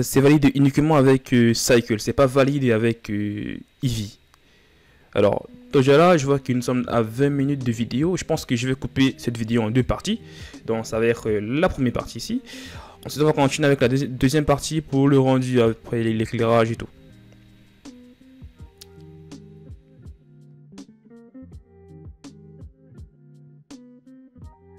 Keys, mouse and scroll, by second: 21.3-21.9 scroll up 3, 21.4 right click, 21.9 click, 22.0-22.5 scroll down 1, 22.5 scroll up 1, 22.6-23.1 right drag, 23.1 click, 23.4 scroll down 1, 23.5 shift+scroll up 1, 23.8 right click, 24.2 drag.